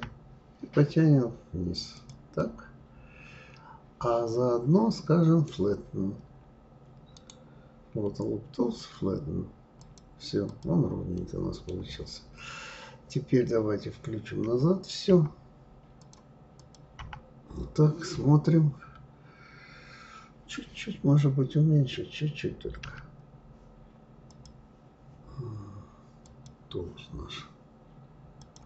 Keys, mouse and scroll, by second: 2.4-5.4 middle drag, 5.5-7.1 scroll down 2, 7.1-10.2 right drag, 10.5 click, 11.2 middle click, 11.9-13.2 scroll down 3, 13.2-14.4 scroll down 1, 14.4 KP_Divide, 15.1 KP_Divide, 16.0 click, 17.0 KP_Divide, 17.7-19.1 scroll down 9, 22.8 s, 24.3 click, 26.2 click, 28.4-28.6 drag.